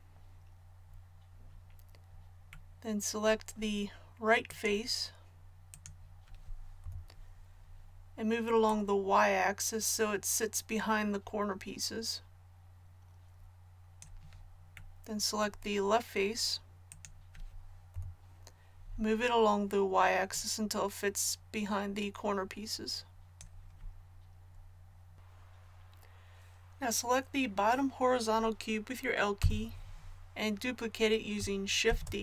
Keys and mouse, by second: 6.8 KP_3, 17.6 click, 17.9 KP_3, 20.3-22.2 drag, 29.4 l, 31.9 shift+d.